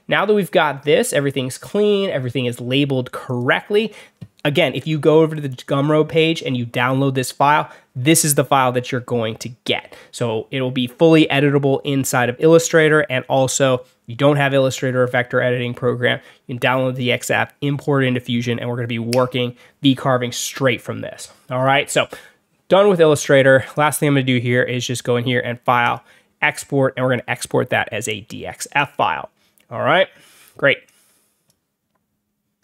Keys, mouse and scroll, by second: 0.4 alt+scroll down 1, 0.6 alt+scroll up 2, 3.2 click, 23.6 click, 25.7 click, 28.7 click, 30.8 click, 32.5 click.